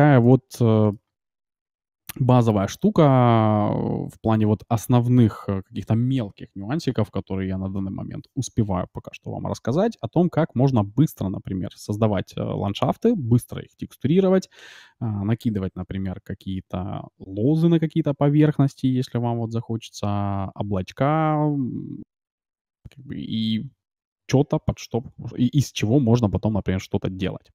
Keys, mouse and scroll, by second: 0.0-1.0 middle drag, 27.2 middle click.